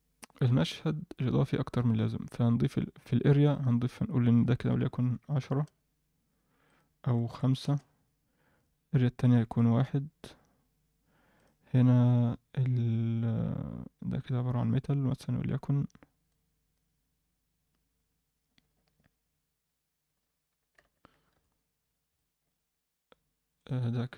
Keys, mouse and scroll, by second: 2.1-2.9 scroll down 1, 2.9-3.4 scroll down 1, 3.4 click, 4.3-5.6 drag, 6.6-7.6 drag, 8.5 click, 9.2 click, 11.3 click, 13.4-13.9 scroll up 1, 13.9-14.6 scroll down 2, 16.2-16.8 drag, 16.2 scroll down 2, 20.8 alt+a, 21.3 KP_1, 21.8-22.1 scroll down 2, 22.1-22.5 middle drag, 22.6-23.6 scroll down 2, 23.6 click.